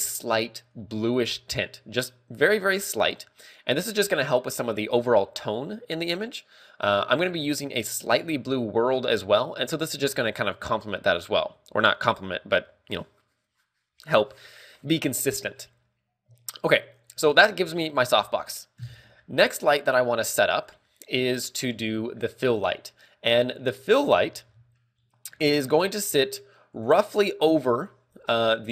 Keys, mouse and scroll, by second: 6.9 click, 11.4 click, 12.0 ctrl+w, 17.9-18.5 scroll down 5, 18.3 middle click, 18.7 scroll up 2, 19.2 scroll up 1, 19.2 KP_7, 20.3 shift+middle click, 21.3 shift+middle click.